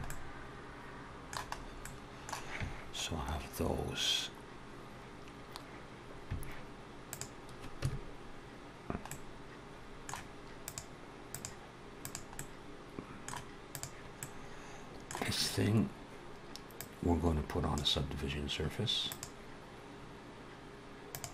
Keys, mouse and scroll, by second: 1.4 scroll up 1, 1.7 middle click, 7.2 click, 7.7 Tab, 8.9 middle click, 10.4 click, 12.2 middle click, 13.6 click, 14.0 middle click, 16.5 click, 19.1 click.